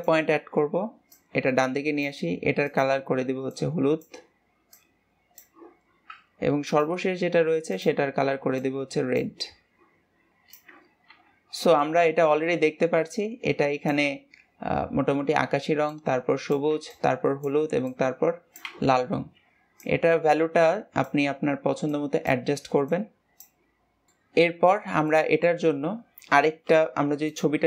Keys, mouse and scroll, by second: 0.2-3.2 drag, 7.0 click, 8.0 click, 10.3-19.2 drag, 20.2-24.1 drag, 24.1 scroll down 3, 24.1 middle click, 24.7-25.4 scroll down 2, 25.4-27.6 middle drag.